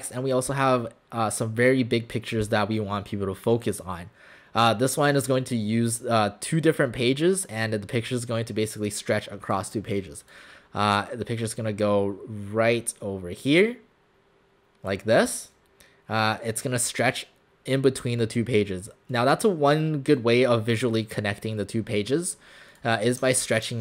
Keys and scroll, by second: 23.7 ctrl+alt+shift+c.